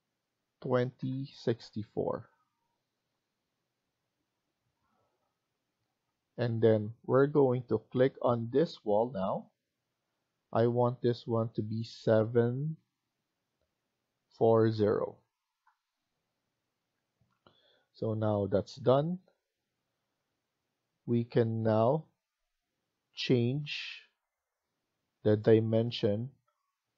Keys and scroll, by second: 0.5-2.1 typing, 2.1 Return, 12.7 typing, 14.1-14.8 typing, 15.4 Return, 16.2-17.0 typing, 18.5-19.2 typing, 19.6 Escape.